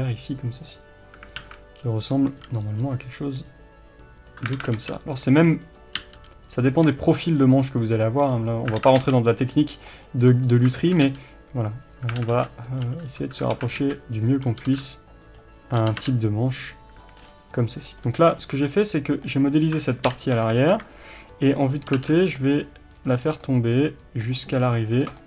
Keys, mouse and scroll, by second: 0.5-1.4 drag, 1.4 alt+a, 2.6 b, 4.3 click, 4.6 alt+a, 6.6 click, 6.7 r, 8.1 g, 8.8 alt+a, 9.2 b, 9.3 click, 9.5 g, 10.0 right click, 10.4 click, 11.0 g, 11.9 click, 12.2 alt+a, 12.6 b, 13.5 alt+a, 14.2 b, 15.3 right click, 15.8 g, 17.2-17.6 scroll down 1, 17.8 scroll up 1, 18.1-23.2 middle drag, 20.0 ctrl+l, 20.7 KP_3, 21.9 g, 23.2 scroll down 1, 23.4-25.2 middle drag, 24.3 scroll up 1.